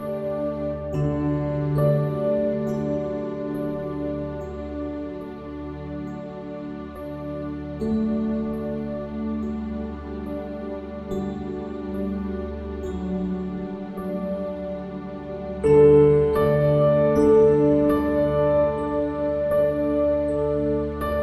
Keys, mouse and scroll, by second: 0.0-1.5 typing, 0.2 right click, 0.9 click, 2.5 click, 2.8 x, 3.7-5.1 drag, 5.3 click, 6.1 click, 6.4-7.7 ctrl+z, 7.8 ctrl+z, 7.9 ctrl+z, 8.3 ctrl+z, 8.4 ctrl+z, 8.7 ctrl+z, 9.4 w, 10.1 click, 10.6 x, 11.3 click, 12.4 i, 13.6 middle click, 14.2 s, 15.6 middle click, 16.3 click, 17.1 middle click, 17.6 s, 18.6 ctrl+KP_Add, 19.3 click, 19.7 Tab, 19.9 middle click, 20.3 Tab, 21.1 click.